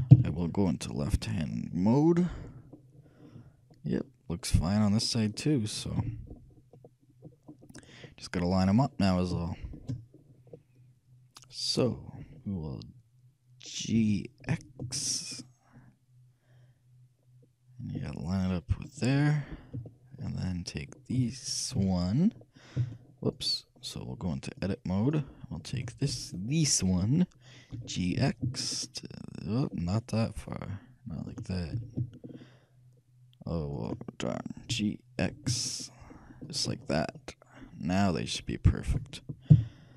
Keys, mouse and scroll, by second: 0.2 ctrl+KP_6, 0.3 ctrl+KP_3, 3.3-4.9 middle drag, 5.4 middle click, 6.0 t, 8.2-12.3 middle drag, 14.0 g, 19.5-22.3 middle drag, 21.3 shift+a, 22.3 shift+a, 22.9 shift+a, 23.5-25.2 right drag, 24.7-26.5 drag, 25.8 a, 26.3 b, 27.1 middle click, 27.8 g, 31.8 g, 34.8 g, 36.9-37.2 scroll up 1, 37.2-39.6 middle drag, 39.6 KP_3, 39.7 middle click.